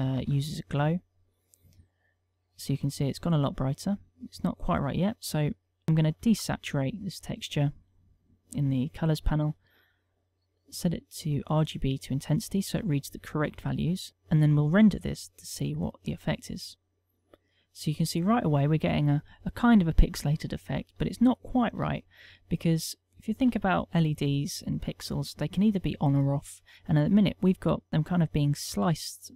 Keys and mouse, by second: 2.4 middle click, 3.1 middle click, 4.2 middle click, 5.7 click, 6.7 click, 9.8 middle click, 10.6 middle click, 12.3 click, 13.4-14.1 middle click, 14.8 middle click, 16.7 click, 17.2 F12.